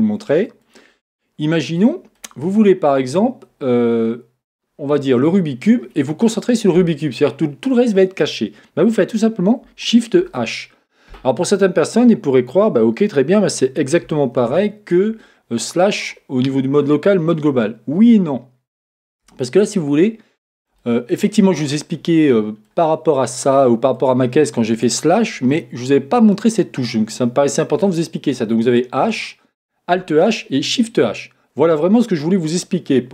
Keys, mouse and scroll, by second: 0.9 scroll up 1, 5.2 click, 10.2 shift+h, 14.4 alt+h, 19.8-20.8 scroll up 2, 20.8-23.9 shift+middle drag, 21.8-22.2 scroll down 2, 23.9 click, 25.5-27.0 middle drag, 27.0-28.9 scroll up 2, 28.9-31.4 middle drag, 28.9-31.4 scroll up 1, 32.8-33.1 scroll down 2.